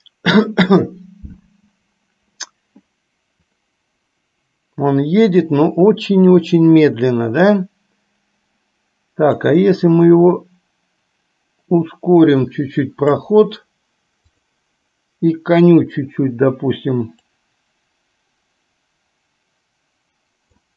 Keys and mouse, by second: 9.6-13.3 drag, 14.5 click, 17.4-20.7 drag.